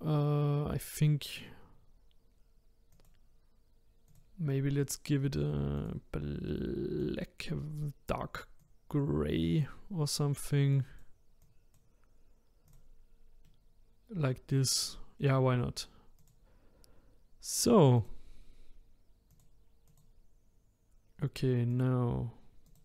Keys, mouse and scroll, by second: 2.9 click, 4.1-5.9 drag, 10.7-12.8 drag, 13.4-16.2 middle drag, 16.2 click, 17.9 click, 19.3 click, 19.9 click, 21.7 click, 22.6 click.